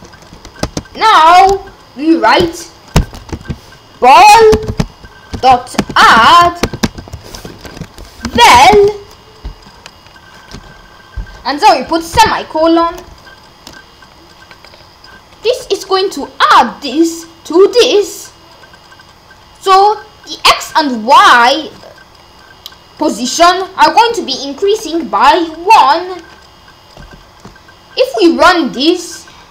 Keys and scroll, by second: 0.6 Return, 3.3-9.2 typing, 7.7 Left, 12.1 ;.